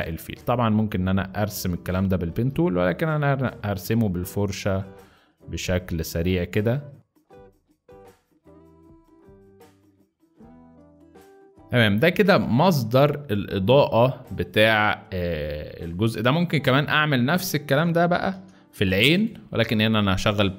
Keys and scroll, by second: 0.9 x, 7.2 ctrl+z, 7.6-9.6 typing, 10.9-12.3 typing, 14.0 z, 15.3 z, 16.0 space, 16.6 space, 18.2 z.